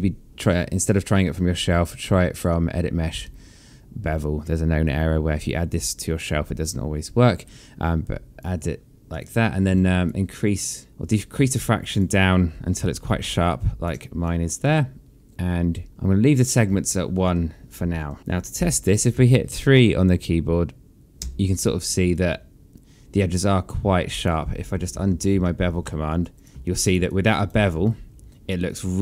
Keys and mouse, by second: 2.3 click, 11.3 alt+click, 12.7 alt+click, 14.0 alt+click, 21.0 3, 21.6 click, 21.9 alt+click, 24.5 ctrl+z, 26.2 click, 26.6 click, 26.9 right click, 27.4 click, 27.6 alt+click.